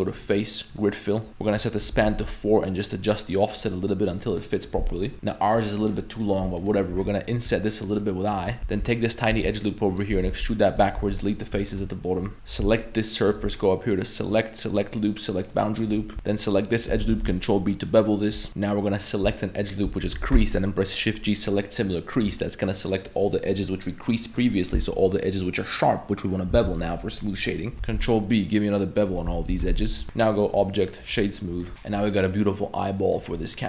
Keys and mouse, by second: 0.3 click, 1.6 click, 4.4 click, 5.1 ctrl+z, 5.1 e, 5.7 middle click, 6.2 middle click, 6.6 middle click, 7.0 i, 8.6 3, 8.6 a, 9.1 alt+click, 9.6 alt+right click, 9.8 alt+right click, 10.2 e, 11.0 x, 11.6 shift+middle drag, 12.3 2, 12.3 1, 12.3 3, 13.3 ctrl+shift+right click, 14.3-15.6 drag, 16.1 alt+shift+2, 16.7 alt+shift+click, 17.1 ctrl+b, 18.9 middle click, 19.6 alt+right click, 20.4 shift+g, 22.5-22.9 middle drag, 22.9 click, 27.7 ctrl+b, 27.9 ctrl+b, 29.3 a, 29.5 a, 29.7 shift+w, 30.0 Tab, 30.0 middle drag, 30.4 click, 31.7 middle click, 32.1-33.2 middle drag, 33.6 middle drag.